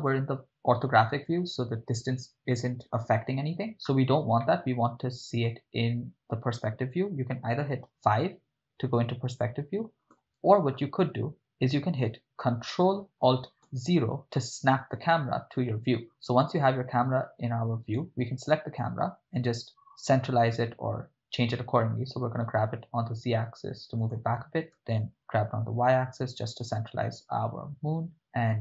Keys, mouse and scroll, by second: 4.6-5.5 ctrl+middle drag, 7.9 KP_5, 10.1 KP_5, 13.7 ctrl+alt+KP_0, 18.0-19.6 right drag, 19.6 g, 20.5 z, 24.0 click, 24.7 g, 25.3 y.